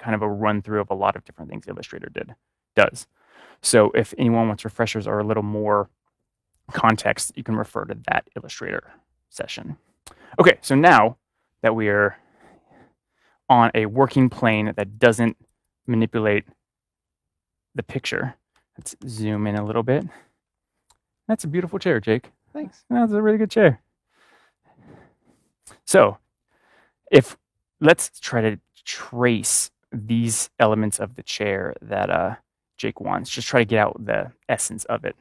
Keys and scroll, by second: 18.7 ctrl+=, 19.6 ctrl+=.